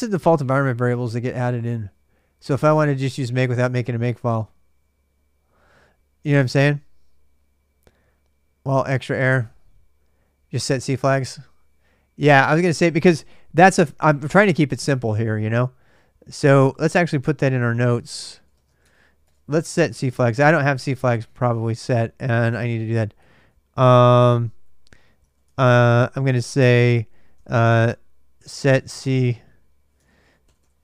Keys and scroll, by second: 6.1-6.8 typing, 13.5 ctrl+[, 14.0-15.2 typing, 15.9 ctrl+a, 16.1 ctrl+a, 17.4 ctrl+a, 17.4 ctrl+[, 17.5-19.8 typing, 19.0 Return, 19.5 ctrl+[, 19.6 ctrl+j, 20.9-25.5 typing, 26.9-30.8 typing.